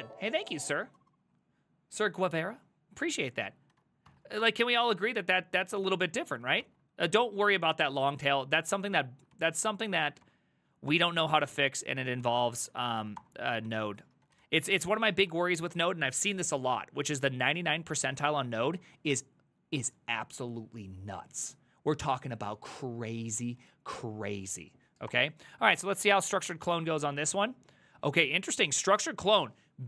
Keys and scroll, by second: 3.8 ctrl+a, 4.1 3, 6.7 alt+{, 8.0 ctrl+c, 8.2 ctrl+c, 8.3 ctrl+c, 8.5-10.1 typing, 10.3 Up, 10.9 Return, 12.1-15.2 typing, 15.3 Return, 18.2 ctrl+a, 18.4 ctrl+a, 18.7 Up, 25.1 Return.